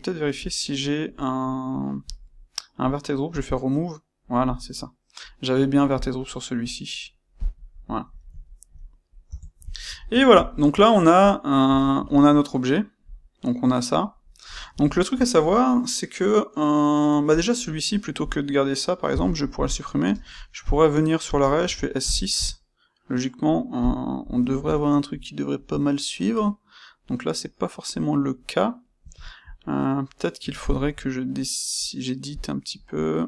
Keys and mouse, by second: 1.9 click, 3.3-4.6 drag, 4.6-5.9 middle drag, 5.9 click, 7.3 click, 7.8 middle click, 9.2 Tab, 9.7 ctrl+middle click, 13.0 click, 14.2-17.2 middle drag, 17.2 click, 18.2 click, 19.0 x, 19.5 click, 20.0 space, 23.8 click, 24.1-32.3 middle drag, 32.3 click.